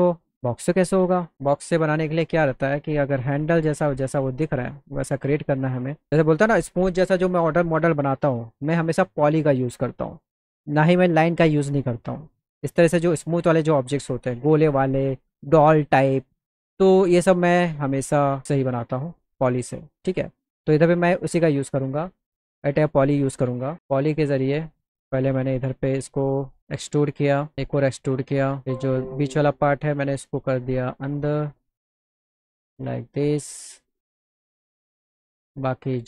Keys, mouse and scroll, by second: 1.7 alt+middle click, 4.8 alt+middle click, 5.7 alt+middle click, 18.0 alt+middle click, 19.4 middle click, 21.4 click, 21.7 click, 22.5 click, 23.9 click, 26.6-28.5 drag, 30.1 click, 31.3-32.5 drag, 33.0 alt+click, 34.0 alt+click, 34.6 alt+click, 35.4 click.